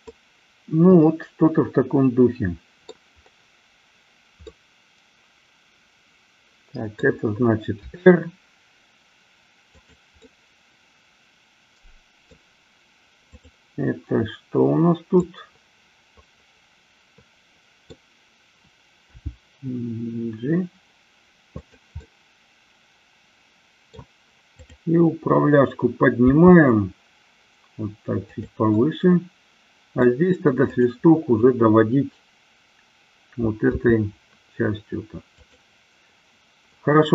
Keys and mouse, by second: 0.2-3.0 middle drag, 4.4-7.2 middle drag, 7.9 r, 10.3-12.5 middle drag, 13.3-14.7 drag, 15.2-18.0 middle drag, 19.3 g, 21.7 click, 22.0-24.0 middle drag, 24.7-25.8 drag, 26.3 g, 28.5 click, 28.8-30.2 middle drag, 30.8-32.3 drag, 33.8 r.